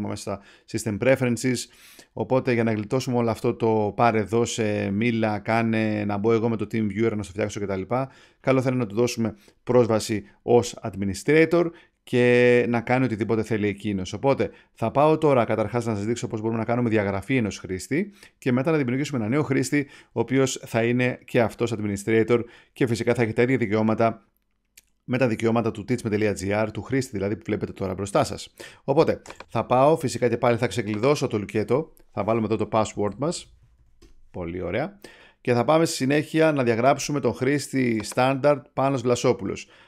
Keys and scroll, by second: 34.0 Return.